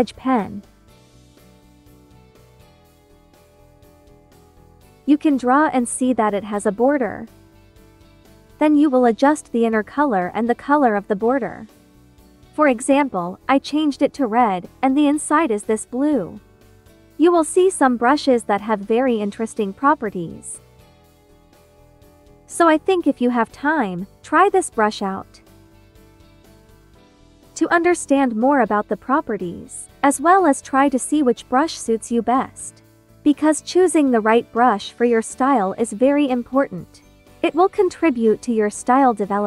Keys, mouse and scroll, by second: 1.2-4.3 drag, 4.3-18.7 drag, 18.7 ctrl+z, 25.4 ctrl+z, 25.4-28.5 drag.